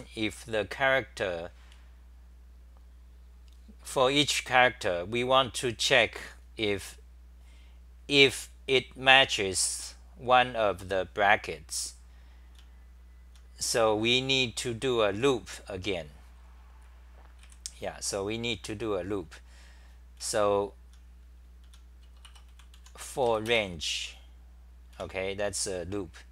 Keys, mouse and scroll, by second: 12.5-13.4 t, 17.4 w, 20.2-22.7 typing, 22.0 Return, 22.2 Return, 25.0 Home.